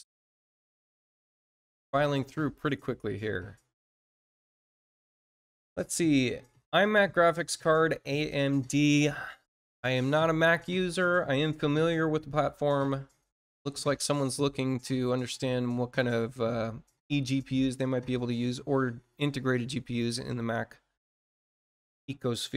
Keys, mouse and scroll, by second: 1.3 click, 8.6 click, 12.1-12.5 scroll down 2, 21.7-22.1 scroll down 2.